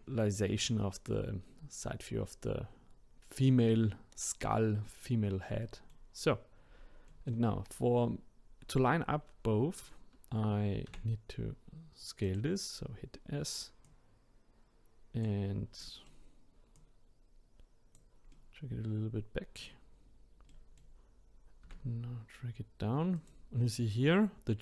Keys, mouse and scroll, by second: 5.6-6.6 middle drag, 6.6-7.1 scroll down 1, 7.1-10.9 middle drag, 10.9 s, 13.8 click, 15.8-16.8 middle drag, 16.8-18.3 drag, 18.3-19.9 middle drag, 19.9-20.5 scroll up 1, 20.5-21.6 middle drag, 21.6 s.